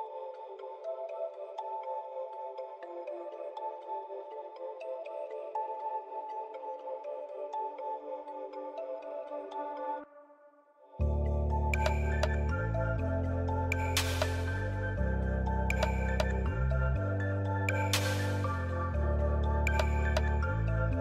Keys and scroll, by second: 13.8 j, 20.4 ctrl+c.